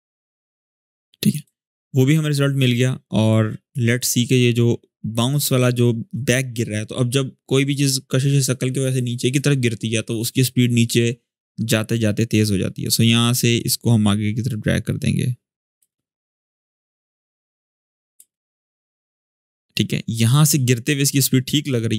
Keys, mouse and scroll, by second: 0.7-1.3 click, 1.3 shift+scroll down 1, 3.0-3.6 drag, 12.1-12.7 drag, 13.6-15.6 drag, 15.5 space, 17.4-18.1 click, 17.9 space, 19.5-21.9 drag.